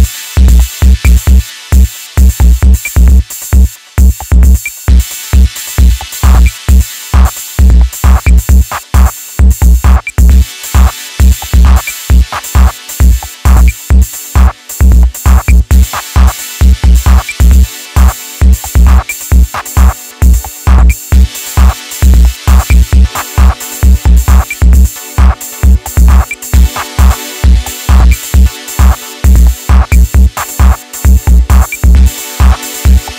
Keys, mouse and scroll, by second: 0.1-2.3 right drag, 2.3-5.4 drag, 6.2-7.2 drag, 8.0 click, 8.9 click, 9.8-11.2 middle drag, 11.2 alt+z, 11.4-14.4 middle drag, 14.9 ctrl+shift+click, 16.3 ctrl+shift+click, 17.2 ctrl+z, 18.4 ctrl+click, 20.0 ctrl+click, 21.0 middle click, 21.8 KP_1, 23.0 click, 28.0-28.5 right drag, 28.5-31.5 middle drag, 31.5 alt+click, 32.8 KP_3.